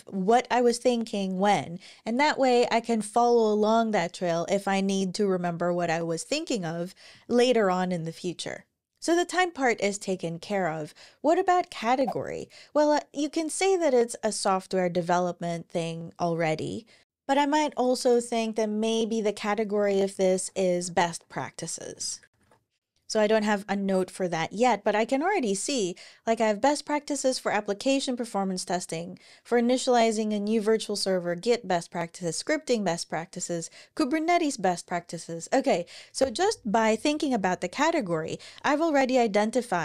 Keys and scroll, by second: 19.5-23.0 typing.